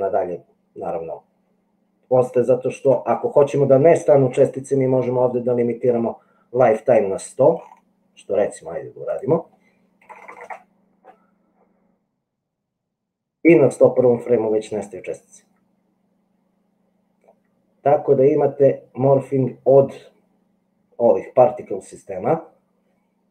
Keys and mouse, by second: 1.1-2.9 drag, 9.4-11.1 middle drag, 10.3 KP_0, 12.6-15.4 drag, 15.4-19.9 middle drag, 19.9-23.3 drag.